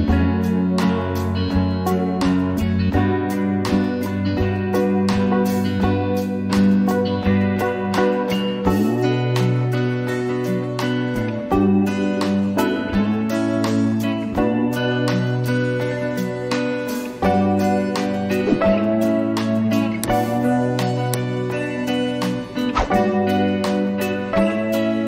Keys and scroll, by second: 5.0 ctrl+t, 21.9 ctrl++, 22.4 ctrl++, 24.6-25.0 space.